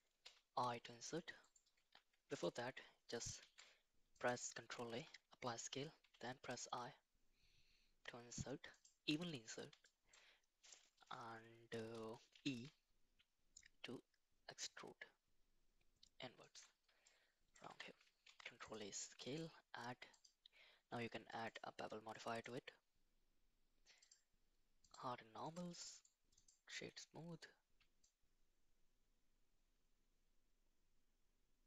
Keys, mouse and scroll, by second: 0.2 i, 2.0 Tab, 3.4 ctrl+a, 4.9 Tab, 6.0 i, 9.9 shift+middle click, 12.4 e, 17.1 middle click, 17.7 Tab, 18.2 ctrl+a, 19.3-21.5 drag, 22.1 middle drag, 24.0 click, 24.8 click, 25.4 click, 25.9 right click, 28.1-31.6 shift+drag.